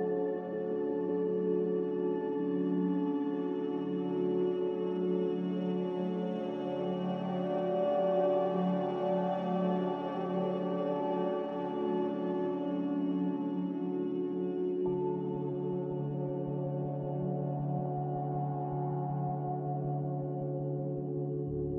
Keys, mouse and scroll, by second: 2.2 n, 7.8 z, 9.6-10.4 typing, 12.1 a, 18.3-19.2 typing, 20.9-21.7 typing.